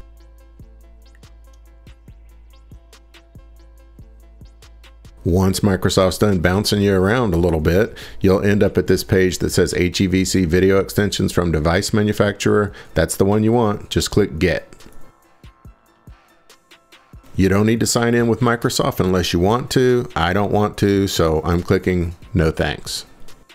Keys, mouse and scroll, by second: 14.9 click, 23.3 click.